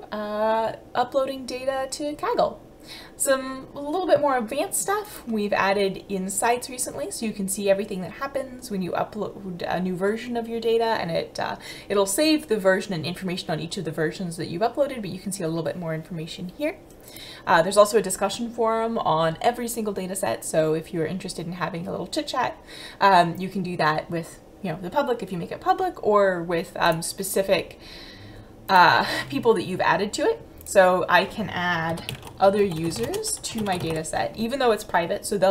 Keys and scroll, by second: 31.9-33.8 typing, 34.9 n.